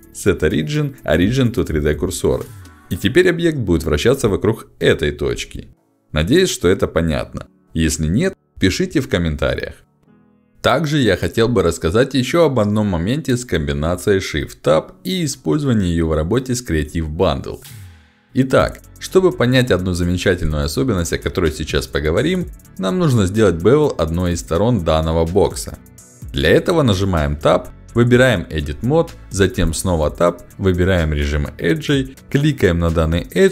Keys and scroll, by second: 3.4 r, 5.3 Escape, 9.7 shift+c.